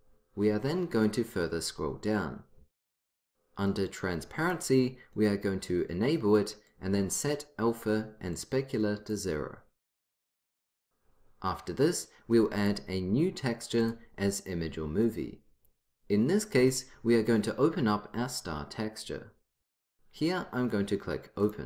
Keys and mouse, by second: 0.7-4.5 middle drag, 5.6-8.3 drag, 21.5 click.